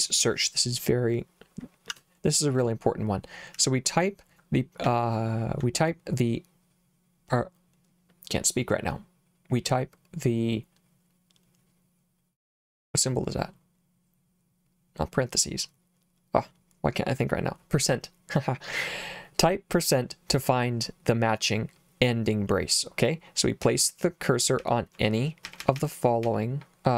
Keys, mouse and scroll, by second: 1.9 Escape, 3.5 h, 4.8 j, 23.6-26.3 typing.